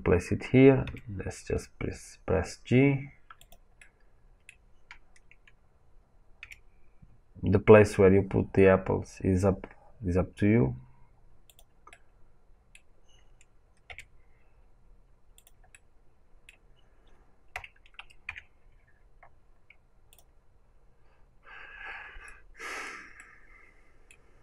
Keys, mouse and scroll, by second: 0.8 g, 3.4 click, 3.7-6.3 middle drag, 6.3 g, 11.4 right click, 11.5 click, 11.8 middle click, 11.9-15.3 right drag, 13.8 g, 15.3 click, 15.6-19.0 right drag, 15.6 middle click, 18.2 click, 19.0-20.0 middle drag, 19.0-19.4 scroll, 20.0 click, 22.2-24.4 middle drag.